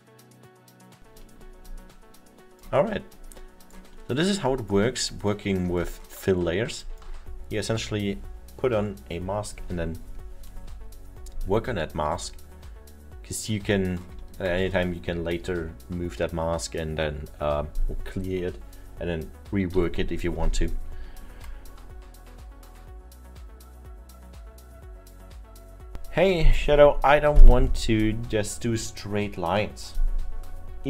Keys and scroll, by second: 12.0 alt+7.